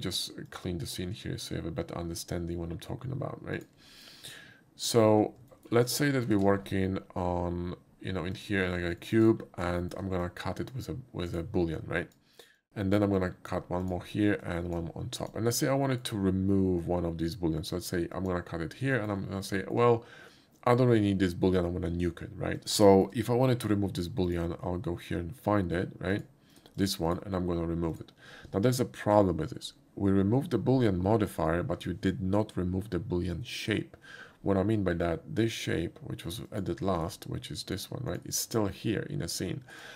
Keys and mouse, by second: 0.5 click, 0.5 shift+a, 3.6 click, 4.9 click, 5.5 shift+middle click, 5.9 shift+middle drag, 8.4 click, 9.0 shift+middle click, 9.8 shift+middle click, 10.2-10.7 shift+drag, 11.3 shift+right drag, 11.8 shift+click, 12.5 shift+click, 13.2 drag, 13.8 click, 14.4 click, 15.2 click, 15.9 shift+middle click, 16.8-17.7 shift+drag, 18.2 shift+click, 19.0 middle click, 19.6 shift+middle drag, 22.6 ctrl+z, 22.9 shift+middle click, 24.3 shift+click, 26.2 click, 26.5 click, 26.8 click, 27.1 click, 28.0 click, 36.5 click, 37.7 click, 38.1 click, 38.5 click, 39.4 click, 39.7 click.